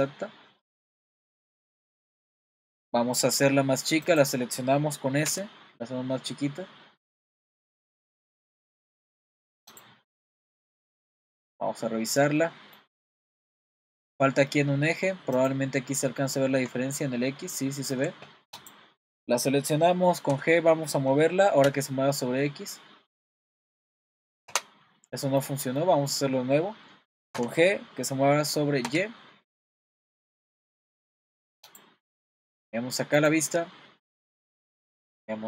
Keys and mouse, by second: 4.1 click, 5.3 s, 9.8 click, 10.2 middle click, 11.1-11.4 middle drag, 12.4-12.8 middle drag, 13.2-13.7 shift+middle drag, 17.4-18.0 shift+middle drag, 18.6 click, 20.3 g, 25.1 middle drag, 27.3 g, 35.1 click.